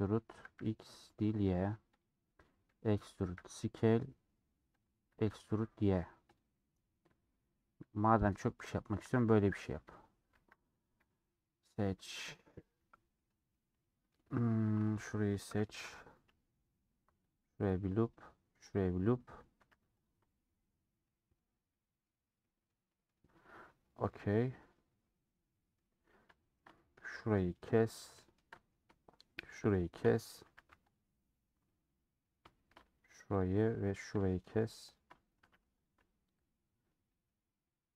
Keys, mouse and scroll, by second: 6.5-9.3 middle drag, 9.3 3, 9.4 alt+click, 10.4 ctrl+z, 10.9 alt+click, 11.4 middle click, 12.3 ctrl+z, 12.9 ;, 13.1-14.2 middle drag, 14.8-16.0 alt+drag, 16.2-17.4 middle drag, 17.4 click, 17.7-18.8 middle drag, 18.8 click, 19.1 middle click, 19.7 a, 23.7 scroll down 4, 24.1-25.9 middle drag, 25.9-26.3 scroll up 3, 26.3 shift+middle click, 27.1 2, 28.0 scroll down 1, 28.1-29.6 shift+middle drag, 29.6 shift+click, 30.5 a, 30.6 scroll up 1, 30.6 u, 31.6 middle click, 32.5 scroll down 1, 33.5 click, 33.8-35.0 shift+middle drag, 35.0 shift+click, 35.5 a.